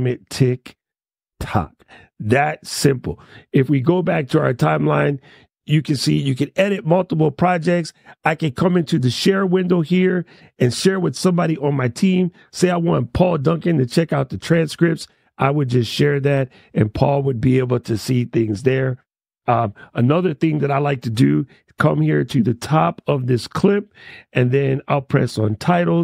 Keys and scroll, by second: 1.1 shift+t.